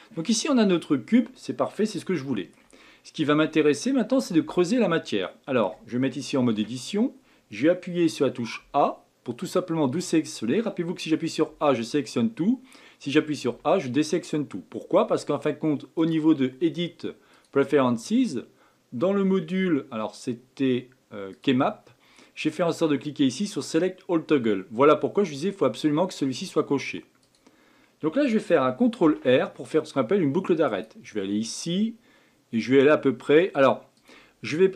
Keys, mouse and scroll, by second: 0.0 scroll up 2, 0.6-1.0 scroll up 9, 1.9-2.8 shift+middle drag, 2.8-3.3 scroll up 3, 3.3-5.7 shift+middle drag, 5.7-6.5 scroll up 1, 6.5 Tab, 8.5 a, 15.9-19.1 drag, 29.0 ctrl+r.